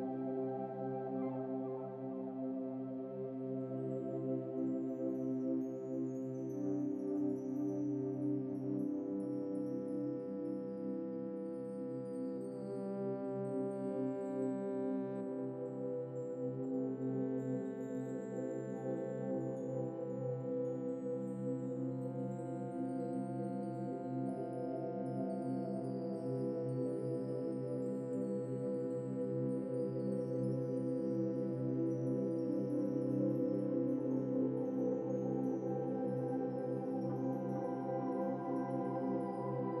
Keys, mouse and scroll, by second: 1.5 scroll down 4, 1.7-4.7 shift+middle drag, 4.7 Tab, 4.9 Tab, 5.2 scroll up 1, 5.7-6.0 scroll down 2, 6.2 click, 6.9 Tab, 7.4 a, 8.1 a, 9.5 u, 12.8-14.0 drag, 20.5 Tab, 21.1 click, 21.8 middle click, 22.7-24.4 drag, 24.9-25.3 scroll up 2, 25.3-25.6 scroll down 1, 25.6 shift+middle click, 26.3 click, 31.8 click, 32.7 scroll up 2, 33.0-34.4 middle drag, 34.4 click.